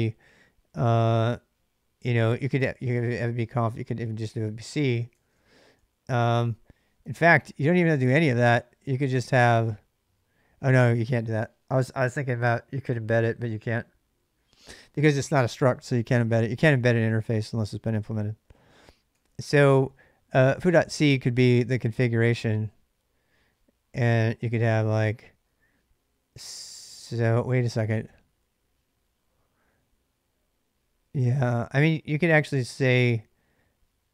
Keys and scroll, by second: 1.8-8.0 typing, 6.8 ctrl+[, 6.9 ctrl+j, 16.5-17.7 typing, 18.9 typing, 32.8 typing.